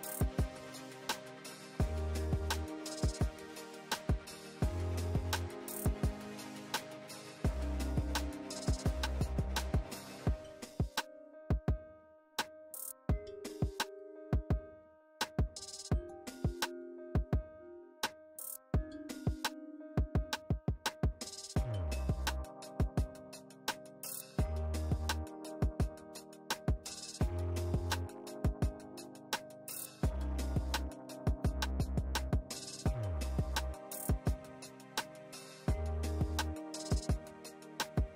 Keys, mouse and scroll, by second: 0.5 click, 3.1-4.1 typing, 5.8 Return, 11.0 click, 14.1 click, 15.4 click, 16.0 right click, 16.6 click, 17.2 right click, 18.0 click, 18.4 alt+Tab, 19.3 ctrl+v, 19.8-20.1 drag, 21.1 ctrl+space, 21.2 ctrl+click, 21.4 ctrl+space, 21.7 drag, 23.9 ctrl+z, 24.4 click, 24.7 ctrl+space, 24.9 ctrl+click, 25.0 ctrl+space, 25.4-25.9 click, 29.2 click, 31.3 click, 34.0 click, 36.7-37.9 drag.